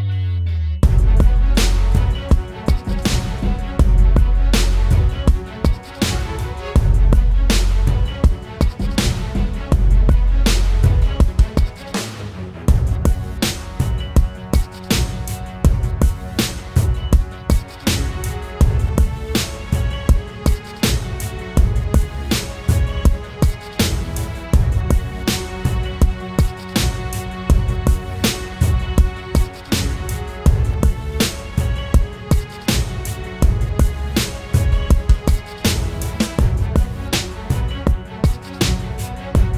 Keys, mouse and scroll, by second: 0.9 double click, 2.3 typing, 2.9 double click, 8.7 right click, 9.8 double click, 10.4 typing, 10.9 double click, 11.9 typing, 13.0 right click, 14.1 double click, 24.2-25.5 scroll down 1, 25.5 scroll down 1, 25.5-27.9 scroll up 1.